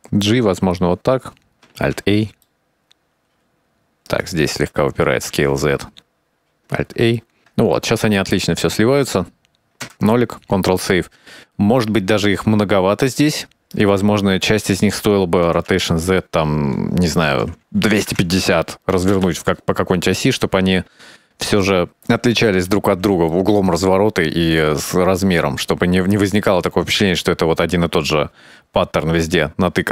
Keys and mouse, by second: 1.4 alt+a, 1.6-2.6 middle drag, 2.7-3.8 shift+middle drag, 4.1 right drag, 4.5 s, 7.2 alt+a, 7.5 middle click, 8.4-9.8 shift+middle drag, 10.2 KP_0, 11.1 ctrl+s, 12.9 c, 14.8 right drag, 15.4-16.1 middle drag, 16.4 r, 21.4-22.9 shift+middle drag, 24.7 alt+a, 25.2-26.5 middle drag.